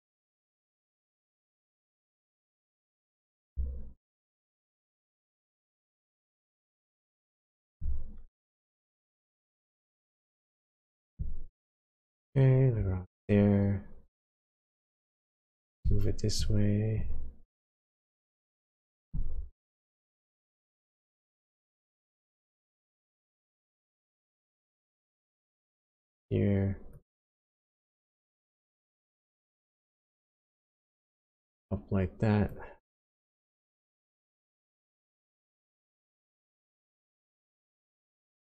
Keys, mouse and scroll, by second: 0.0 shift+click, 13.2 shift+click, 19.8 shift+click, 22.7 shift+click, 26.9 shift+click, 32.5 shift+click.